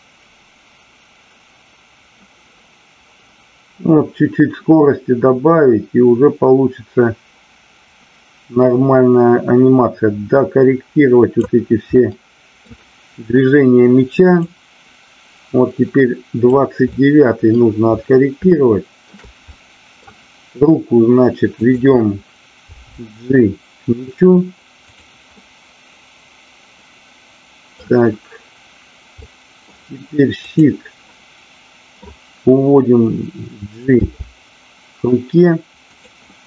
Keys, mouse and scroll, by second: 12.0-12.5 middle drag, 14.4-16.6 drag, 16.9-17.6 middle drag, 18.4-18.9 shift+middle drag, 19.5-20.0 middle drag, 21.7-22.4 drag, 24.9 click, 25.3-27.7 middle drag, 27.7 scroll down 1, 29.3 middle click, 31.2 middle click, 35.8 click, 36.3-36.4 middle drag.